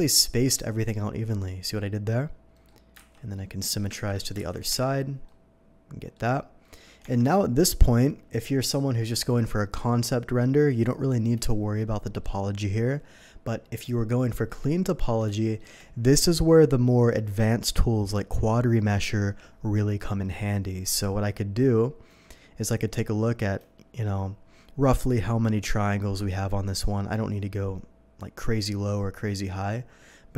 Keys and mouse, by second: 0.7-10.1 drag, 2.9 alt+x, 3.9 ctrl+z, 4.5 alt+x, 4.7 Tab, 12.1-20.9 drag, 20.9 Tab, 26.2 n.